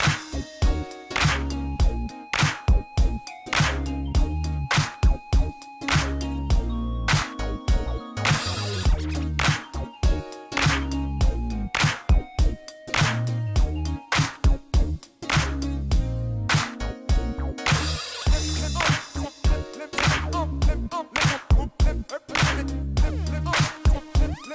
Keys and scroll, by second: 1.4 g, 2.3 g, 2.9 g, 3.9 Tab, 4.1 shift+z, 7.4 shift+d, 7.5 x, 8.3 shift+z, 9.5 ctrl+p, 11.1 shift+z, 11.7 alt+a, 12.4 shift+z, 14.6 7, 15.8 g, 15.9 y, 19.6 1, 19.8 shift+z, 20.3 Tab, 21.1 shift+z, 23.5 ctrl+r, 24.3 g.